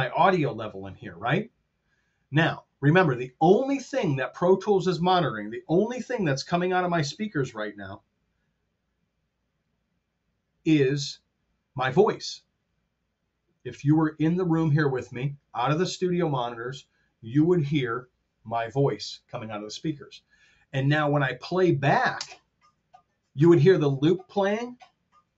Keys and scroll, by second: 22.2 space.